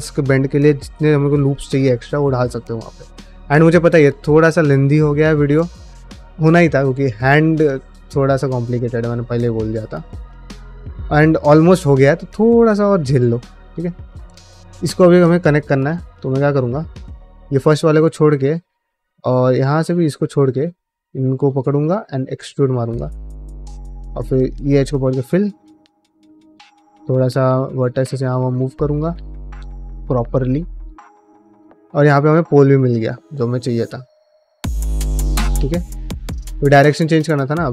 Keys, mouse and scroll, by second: 1.8-3.1 middle drag, 5.7 middle click, 6.7 ctrl+middle click, 7.2 middle click, 7.6 shift+middle click, 9.5 shift+middle click, 9.8 middle click, 10.3 ctrl+middle click, 10.6 shift+middle click, 11.0 shift+middle click, 13.2 middle click, 13.7 1, 14.0 click, 14.3 middle click, 14.8 2, 15.2 click, 15.5 middle click, 15.8 1, 16.1 click, 16.2 middle click, 17.7 middle click, 18.4 middle click, 19.2 middle click, 20.2 ctrl+click, 20.4 middle click, 20.9 middle click, 21.3 shift+middle click, 21.5 middle click, 21.8 e, 22.7 s, 23.1 middle click, 23.6 middle click, 23.9-27.0 typing, 24.2 click, 25.0 click, 25.9 click, 26.8 click, 27.5 middle click, 27.7 middle click, 28.2 shift+middle click, 28.4 middle click, 28.9 shift+middle click, 29.3 middle click, 29.7-32.6 typing, 30.2 click, 31.0 click, 31.7 middle click, 32.8 click, 33.2 middle click, 34.2 f, 34.9 click, 35.0 g, 35.4 middle click, 36.0 shift+middle click, 36.2 middle click, 36.6 shift+middle click, 37.0 middle click.